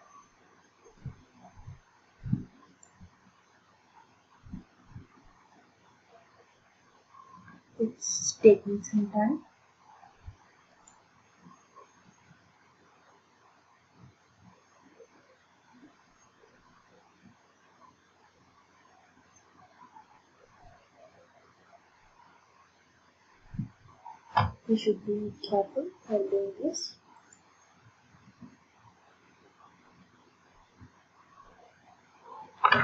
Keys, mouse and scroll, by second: 1.8 ctrl+click, 11.0 ctrl+click, 27.4 ctrl+click.